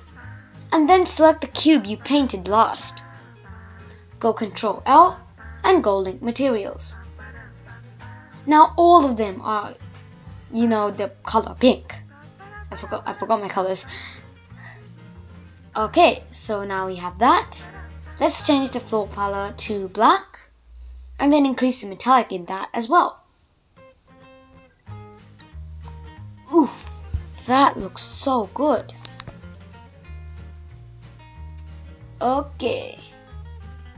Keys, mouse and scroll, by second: 2.5 shift+click, 5.0 ctrl+l, 9.1-9.7 middle drag, 9.7 click, 10.2-10.9 middle drag, 10.9 space, 11.9-12.7 middle drag, 12.7 click, 13.7 click, 15.4 click, 17.1 click, 19.8-20.8 scroll down 5, 21.2 click, 22.0 scroll down 1, 22.1-24.5 middle drag, 24.5-25.0 scroll up 2, 25.0-26.5 middle drag, 26.5 click, 27.0-28.6 middle drag, 28.6 shift+Left.